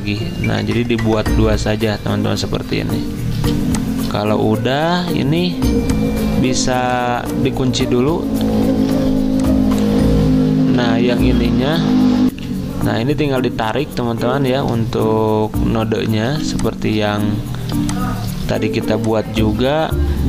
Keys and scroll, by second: 3.4 z, 4.8 a, 8.7 ctrl+2, 10.8 a, 12.3 F10, 12.4 F10, 16.3 z, 17.7 v.